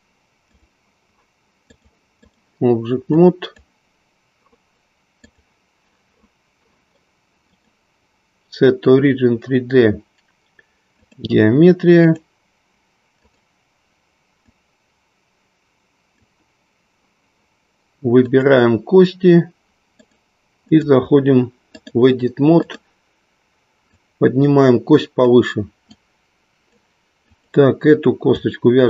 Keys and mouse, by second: 1.8 click, 3.0-4.3 drag, 5.2 click, 7.4-11.2 drag, 13.2 click, 14.3-16.4 drag, 18.2 click, 20.0-20.9 drag, 22.6 click, 23.8-25.4 drag, 25.9-26.9 drag, 27.3 click.